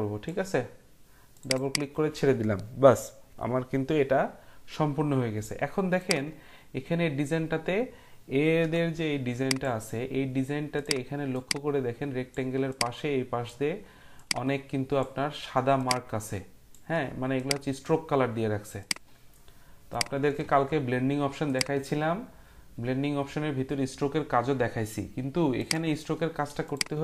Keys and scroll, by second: 8.6 Print.